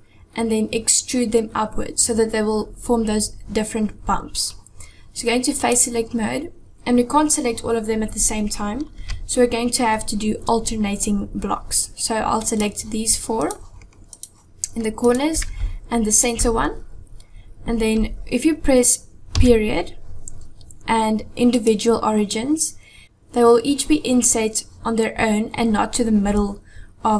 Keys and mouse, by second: 2.2-3.5 middle drag, 5.7 click, 9.0 KP_7, 12.4 click, 13.5 shift+click, 14.2 shift+click, 15.1 shift+click, 16.2 shift+click.